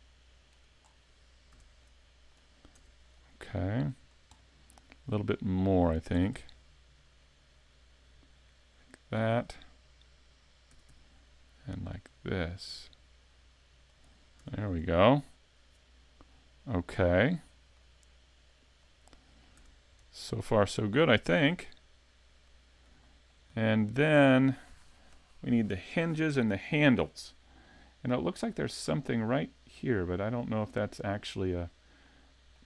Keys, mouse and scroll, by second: 0.8 scroll down 5, 1.5 a, 1.8 middle click, 2.8 Tab, 3.0 scroll up 1, 3.1 middle click, 4.0 scroll down 2, 4.4 middle click, 4.8 scroll up 2, 5.2 scroll down 1, 5.3 middle click, 6.2 s, 10.7 s, 14.0 click, 14.4 a, 14.8 scroll up 2, 15.3 middle click, 16.7 right click, 17.7 click, 18.8-19.1 scroll down 2, 19.1 middle click, 19.6 a, 19.9 scroll up 1, 20.0 middle click, 21.4 s, 23.0 shift+middle click, 23.7 middle click, 26.3 middle click, 28.5-28.9 scroll up 5, 28.9 middle click, 31.1-31.7 scroll down 6, 32.0 shift+middle click.